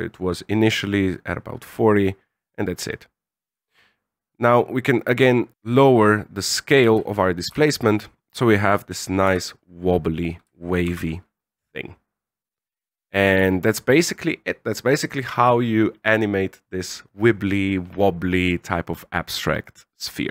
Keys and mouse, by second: 3.5-5.5 shift+drag, 7.0 alt+a, 7.5 alt+a, 9.5 z, 11.2 z.